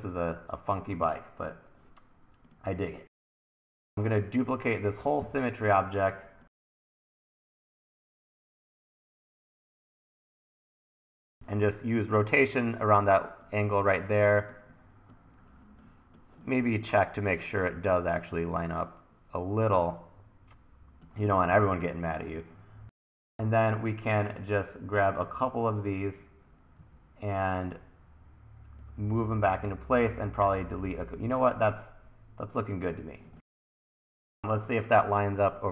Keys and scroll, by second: 1.0 super+s, 5.2 e, 7.0 e, 11.2 r, 15.6 1, 18.5 e, 26.7 w.